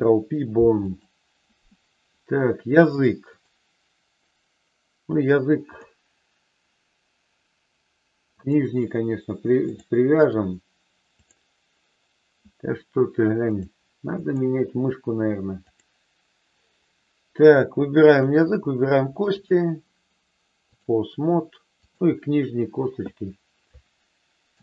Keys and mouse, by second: 3.2-4.6 drag, 5.7 click, 8.3 click, 9.6 click, 11.1 click, 13.5 click, 18.0 shift+click, 19.2-20.9 drag, 21.7-23.1 drag.